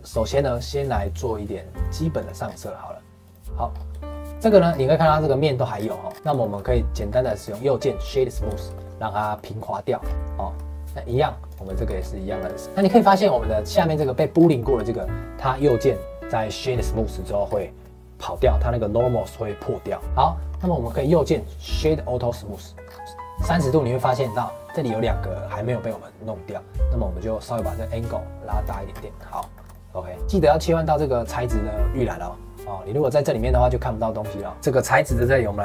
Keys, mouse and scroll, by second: 0.9 click, 1.7 click, 2.1 click, 2.4-2.7 scroll down 4, 3.2 click, 3.7 scroll up 2, 3.9 shift+middle click, 4.7-5.7 scroll up 2, 5.7-6.0 scroll up 1, 6.0-6.4 scroll down 6, 6.4 shift+middle click, 7.3-8.5 right drag, 8.5-10.0 shift+middle drag, 10.0 scroll up 3, 10.2 shift+middle click, 11.0 click, 11.4 click, 11.7 shift+middle click, 11.9-12.4 scroll up 2, 12.4 right click, 12.6-13.6 shift+middle drag, 13.6 click, 13.9-14.3 scroll up 2, 14.3 scroll down 2, 14.6 shift+middle click, 15.5-17.4 right drag, 17.4 scroll up 2, 20.0 middle click, 20.5-21.0 scroll down 2, 21.0-22.2 right drag, 22.2-22.5 scroll up 1, 22.5 middle click, 22.8 scroll up 1, 23.0-24.3 middle drag, 24.3-24.7 scroll up 1, 27.3-28.9 drag, 28.9 scroll down 1, 29.1-31.7 middle drag, 32.9 click, 35.0 click.